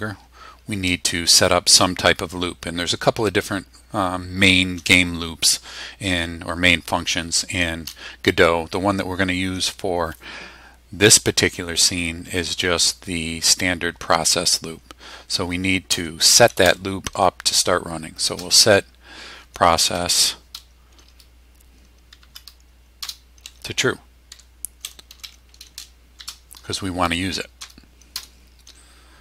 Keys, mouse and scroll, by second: 15.6-17.1 typing, 18.2 shift+-, 19.9 p, 22.2 Down, 23.0 Return, 24.3-26.2 typing, 27.6 Return.